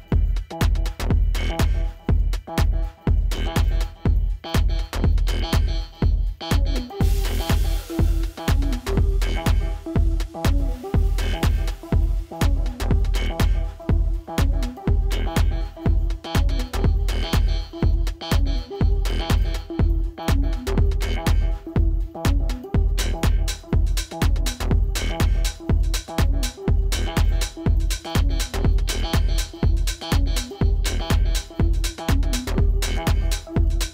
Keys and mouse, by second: 1.2-2.3 typing, 4.1 click, 7.8-8.5 typing, 11.4 click, 18.1 alt+BackSpace, 19.1 space, 19.4 click, 19.6 space, 21.2 click, 23.3 alt+BackSpace, 25.0 click, 26.8 click, 29.3 click, 33.0-33.8 typing.